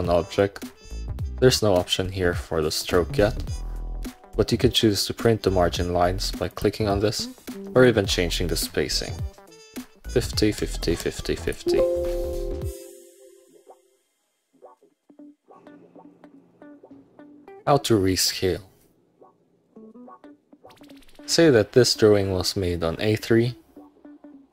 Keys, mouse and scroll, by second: 0.5 middle click, 6.6 click, 7.9 click, 10.2 Tab, 11.1 Tab, 13.3 click, 13.5 scroll down 1, 13.9 middle click, 14.5-15.1 scroll up 2, 20.9 middle click, 23.4-24.5 drag.